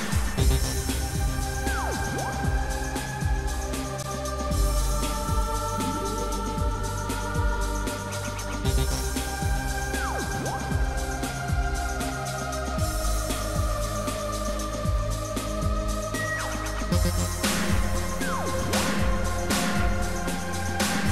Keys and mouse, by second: 2.7 shift+click, 4.6 shift+click, 12.6 click.